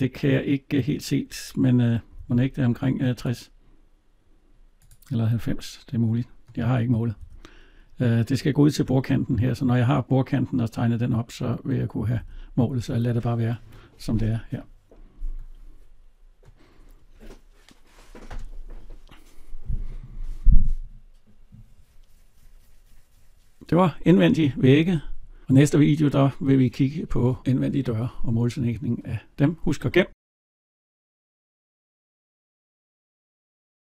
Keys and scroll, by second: 7.1 alt+Tab.